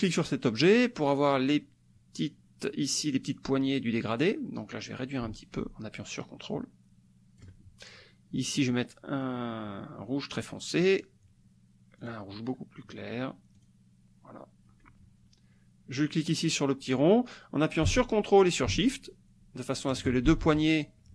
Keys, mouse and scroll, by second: 4.5-7.6 drag, 8.5 click, 10.3 click, 12.0 click, 13.5 click, 16.4-20.2 drag, 20.3 ctrl+shift+z.